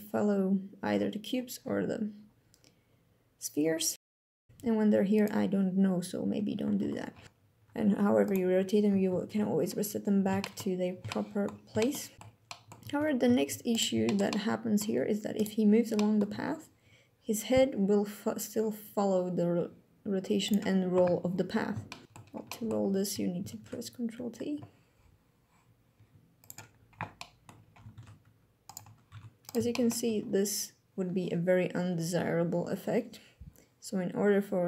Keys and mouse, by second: 4.3 g, 4.8 click, 6.5 alt+g, 7.0 shift+click, 7.2 alt+g, 7.3 click, 7.6 shift+click, 7.9 g, 8.6 click, 9.6 r, 10.1 click, 10.9 alt+g, 11.0 alt+r, 12.1 click, 12.6 ctrl+Tab, 13.7 shift+drag, 13.9-14.5 drag, 15.0 middle click, 15.6 drag, 16.0 g, 20.1 click, 21.5-21.9 shift+drag, 22.0 ctrl+Tab, 22.1 click, 23.3 ctrl+t, 26.0 click, 26.8 click, 27.6 ctrl+Tab, 28.8 Tab, 29.1 click, 29.4 shift+drag, 29.7 g.